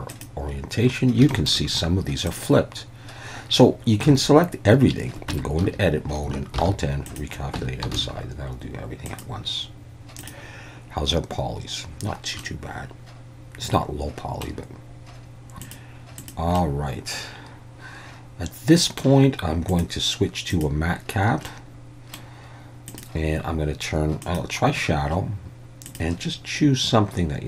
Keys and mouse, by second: 1.3 shift+middle click, 2.3-3.4 drag, 4.1 a, 5.4 Tab, 5.6 a, 6.6 alt+n, 7.7 Tab, 8.0 alt+a, 9.2-10.4 drag, 12.4-14.5 middle drag, 15.6 click, 16.2 click, 16.6-19.0 middle drag, 19.8-20.9 drag, 21.5-22.2 middle drag, 22.9-27.4 drag.